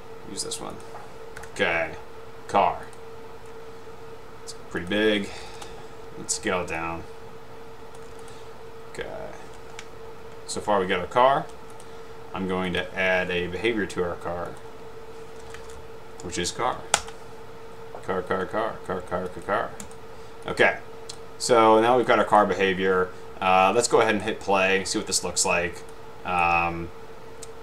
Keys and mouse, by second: 0.9 click, 4.9 click, 5.4 a, 5.6 Return, 7.2 shift+click, 8.3 click, 11.8 click, 12.8 click, 15.4-16.3 typing, 19.9 drag, 21.1 click, 22.3 click, 26.5 click.